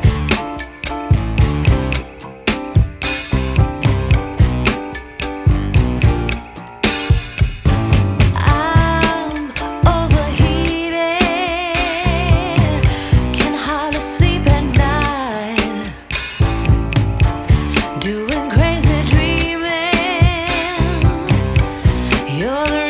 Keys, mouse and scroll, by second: 3.4 click, 5.5 click, 6.6 click, 8.3 click, 9.9 click, 11.1 click, 12.4 click, 15.4 click, 16.8 click, 18.0 click, 19.7 click, 20.6 click, 21.4 click.